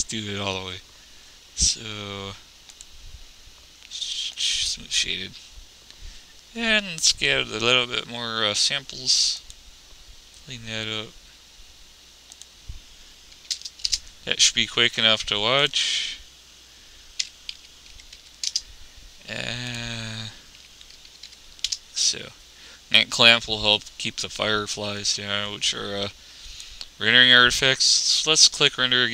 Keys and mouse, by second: 9.4 middle click, 11.4-12.6 middle drag, 14.4 middle click, 15.8-17.6 middle drag, 20.0-21.7 middle drag, 26.0-27.7 middle drag.